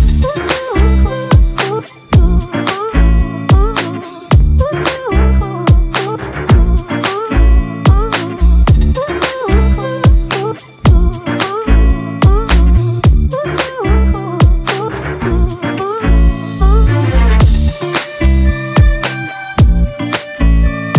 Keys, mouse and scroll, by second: 19.0 ctrl+□, 19.2 ctrl+-, 19.7 ctrl+-.